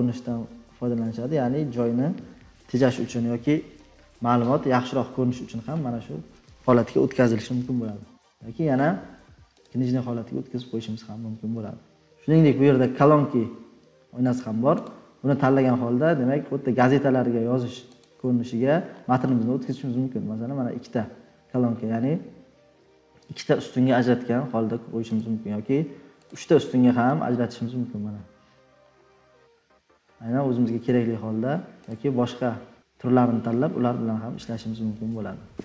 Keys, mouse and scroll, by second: 0.3 scroll down 5, 1.6 scroll down 2, 8.8 click, 9.6 click, 10.1-11.6 scroll.